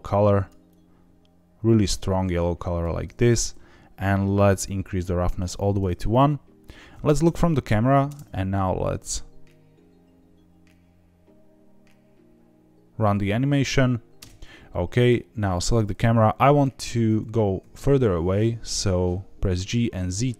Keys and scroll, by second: 7.2 KP_0, 8.0 space, 14.1 space, 17.0 g, 17.2 z, 17.5 z.